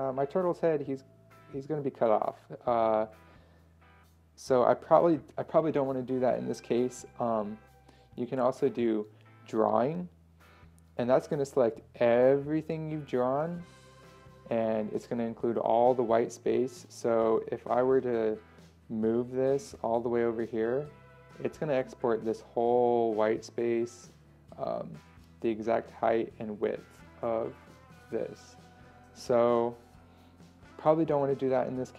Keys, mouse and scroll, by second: 18.5 ctrl+scroll down 1, 19.5-31.9 drag.